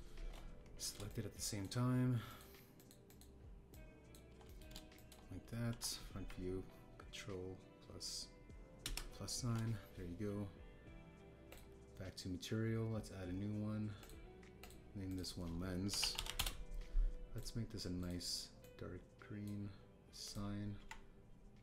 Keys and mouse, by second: 0.1 ctrl+z, 0.8 click, 2.0 shift+click, 3.2 shift+click, 3.7 shift+click, 4.0 shift+click, 4.7 shift+click, 5.4 middle click, 5.9 shift+click, 6.6 KP_1, 9.8 ctrl+KP_Add, 12.5 click, 14.9 click, 15.5 click, 16.0-17.3 drag, 18.3 click, 18.9 click, 21.2 click.